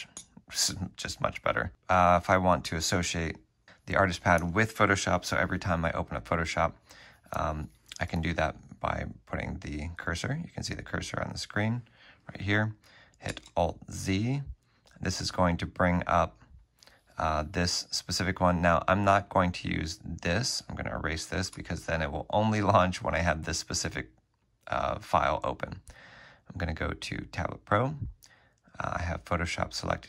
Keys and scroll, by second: 0.2 F3, 13.4 alt+z, 21.4 alt+z, 21.6 BackSpace.